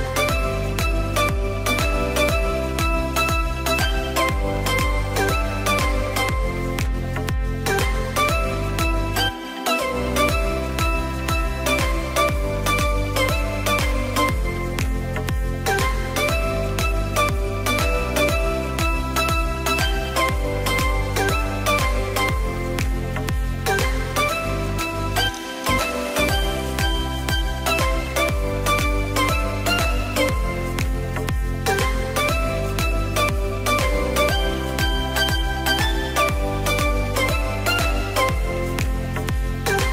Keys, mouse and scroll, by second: 4.4-6.2 middle drag, 6.2 Tab, 7.5 shift+s, 10.5-13.1 drag, 14.0 s, 15.9 KP_7, 16.9-17.7 shift+middle drag, 17.7-19.2 scroll up 4, 19.2 click, 21.4-22.2 drag, 24.2-24.7 scroll up 1, 24.7-25.3 shift+middle drag, 25.3-26.0 scroll up 2, 26.2 s, 27.7 KP_3, 28.8-29.7 scroll down 3, 29.7 click, 32.5 scroll down 1, 32.8-33.9 middle drag, 33.9-34.5 scroll up 2, 34.5 s, 36.8 click, 37.0-37.5 scroll down 2, 37.5-38.5 middle drag, 38.5 click, 39.2 click.